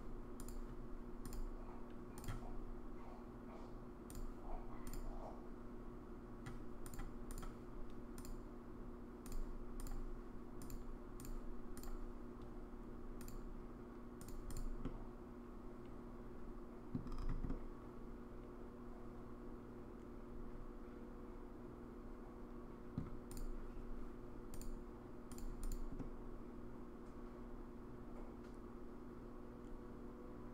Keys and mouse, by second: 1.3 click, 4.1 click, 4.9-7.0 drag, 8.2-9.3 drag, 10.8 click, 13.3-14.3 drag, 14.5 click, 14.8-16.9 middle drag, 17.5-23.0 middle drag, 24.6 click, 26.0-30.5 middle drag.